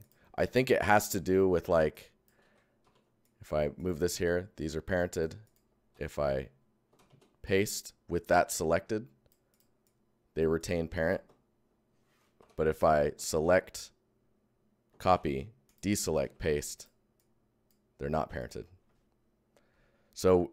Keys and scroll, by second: 0.2 Tab, 2.3 ctrl+Tab, 2.4 ctrl+c, 2.8 ctrl+v, 3.2 Tab, 5.6 ctrl+Tab, 5.9 ctrl+c, 6.9 ctrl+v, 7.4 Tab, 11.2 ctrl+Tab, 12.3 Tab, 13.1 ctrl+Tab, 13.2 ctrl+c, 15.6 c, 15.6 Tab, 16.2 ctrl+v, 16.7 v, 17.1 Tab.